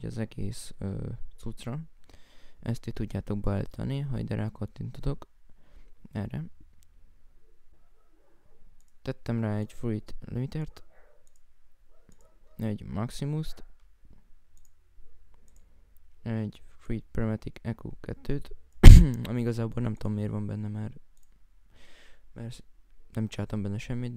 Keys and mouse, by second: 19.5 right click, 21.6 right click.